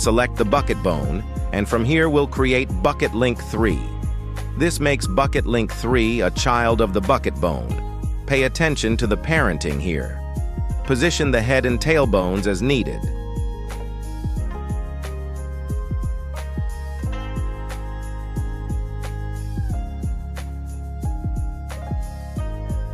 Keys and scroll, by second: 1.2 Escape, 3.9 BackSpace, 4.2 3, 4.6 Return, 6.3 g, 7.7 shift+s, 11.8 ctrl+alt+a, 15.0 s, 16.3 shift+s, 22.4 [.